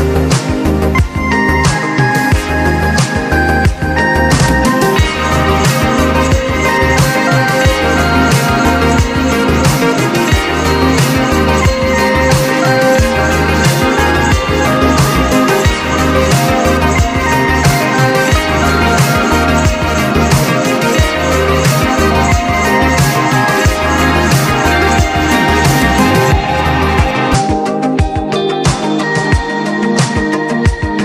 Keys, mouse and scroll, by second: 1.3 typing, 5.0 click, 5.3 right click, 5.8-12.3 drag, 12.6 click, 14.2-17.3 drag, 17.5 click, 18.6-26.3 drag, 26.4 click, 29.0 click.